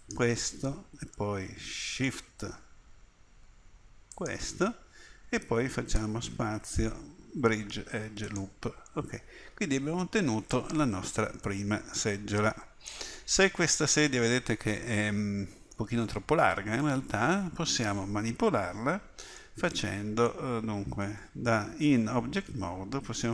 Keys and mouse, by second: 5.9 space, 10.5-13.3 middle drag, 16.9 middle click, 18.7 a, 21.0 Tab.